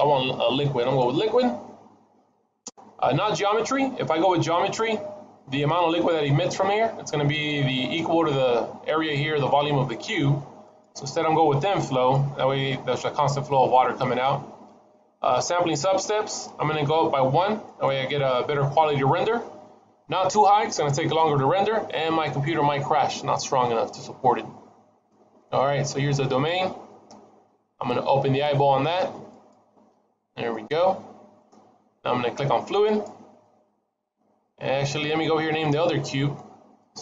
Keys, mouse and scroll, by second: 4.4-6.8 scroll up 1, 6.8-7.5 scroll up 1, 10.5 click, 17.5 click, 23.5 middle click, 26.1 click, 30.4 middle click, 32.7 click, 36.7 click.